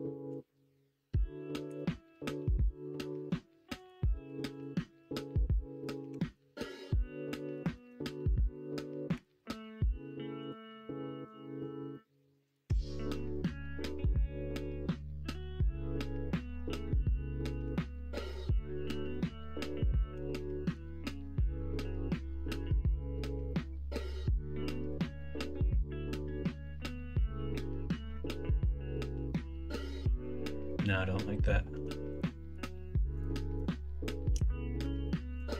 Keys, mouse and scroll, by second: 4.2 1, 6.1 g, 7.7 ctrl+z, 9.1 g, 20.1 g, 30.2 ctrl+z, 34.8 1.